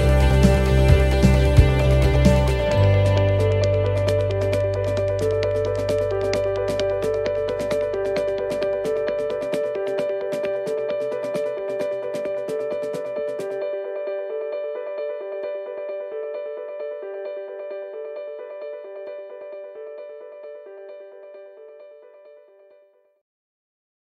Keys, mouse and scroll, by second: 0.0 shift+middle click, 4.0 middle click, 4.6-5.3 scroll down 1, 5.3 middle click, 5.9 shift+middle click, 6.5 ctrl+middle click, 7.6 shift+middle click, 9.7 ctrl+middle click, 10.7 shift+middle click, 15.1 ctrl+middle click, 17.5 shift+middle click.